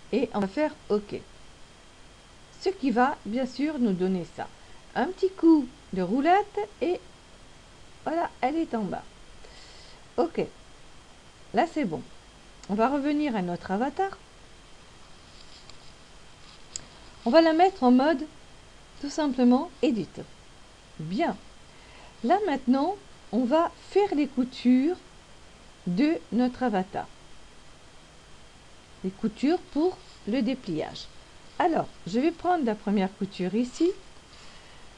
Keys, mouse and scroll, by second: 5.1-5.7 scroll down 2, 6.3-7.5 scroll down 5, 10.3 click, 18.8 click, 20.7 click, 23.8 middle click, 33.2 middle click.